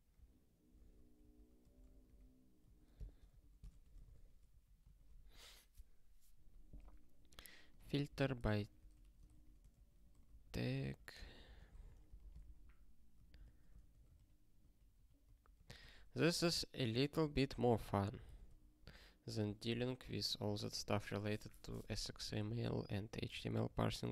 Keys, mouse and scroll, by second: 0.1 ctrl+k, 0.6 ctrl+n, 0.7 ctrl+e, 1.2 ctrl+p, 1.6 BackSpace, 2.1 ctrl+s, 2.6 ctrl+n, 3.3 ctrl+n, 3.6 alt+^, 4.1 ctrl+s, 4.5 ctrl+n, 5.4 ctrl+s, 7.7 click, 8.0 ctrl+b, 8.4-9.4 typing, 9.7 ctrl+n, 10.1 alt+b, 10.2 alt+b, 10.7 ctrl+p, 11.1 alt+b, 11.3 alt+b, 12.1 ctrl+b, 12.4 ctrl+alt+@, 13.4 ctrl+/, 13.7 ctrl+n, 14.1 alt+f, 14.5 alt+f, 15.2 alt+b, 15.8 ctrl+y, 16.4 ctrl+alt+k, 16.8 alt+b, 17.1 alt+b, 17.5 alt+f, 17.7 alt+f, 18.1 alt+b, 18.2-20.3 typing, 23.2 ctrl+s, 23.6 ctrl+p, 23.9 ctrl+p.